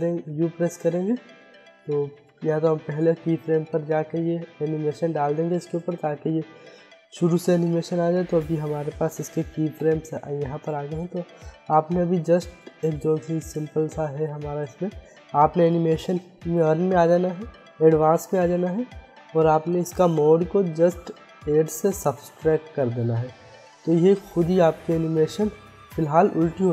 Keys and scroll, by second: 5.0 u, 7.2 u, 24.9 u.